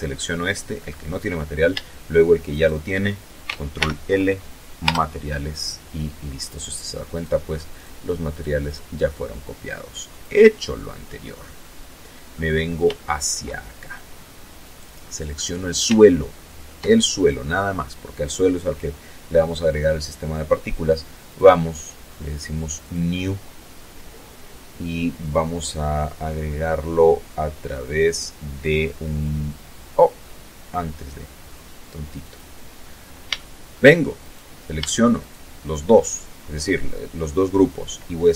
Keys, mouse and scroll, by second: 0.9 shift+right click, 2.2 ctrl+shift+l, 3.3 Return, 4.9 right click, 5.6 right click, 6.2 right click, 6.7-7.4 right drag, 8.6 click, 9.6 scroll down 1, 10.0 middle click, 11.4 shift+middle click, 12.0-12.5 shift+scroll up 1, 13.0 right click, 13.9 scroll down 2, 14.4 shift+middle click, 19.7 click, 21.2 click, 24.0-25.3 scroll down 5, 26.3-26.8 scroll down 2, 30.6 click, 31.4 scroll up 2, 31.8 shift+middle click, 32.6 shift+right click, 33.6 shift+right click.